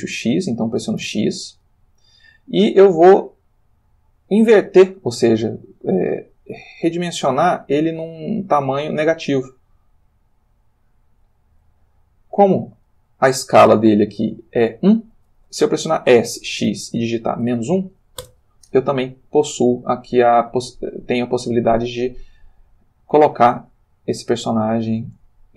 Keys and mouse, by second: 1.0 x, 12.4 Escape, 16.1 s, 16.6 x, 17.4 -, 18.2 Return, 20.9 g, 24.0 click, 24.4 s, 25.0 click, 25.1 g.